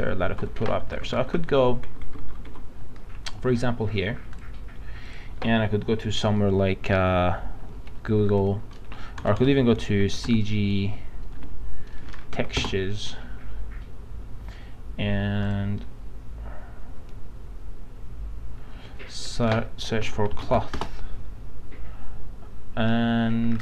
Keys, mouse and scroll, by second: 0.3 alt+Tab, 1.2 alt+Tab, 1.4 alt+Tab, 1.9 alt+Tab, 4.4 click, 8.2 g, 9.2 BackSpace, 9.4 BackSpace, 10.3 ctrl+g, 11.4-12.6 typing, 15.4 click, 19.8-20.9 typing, 23.5 typing, 23.5 scroll down 1.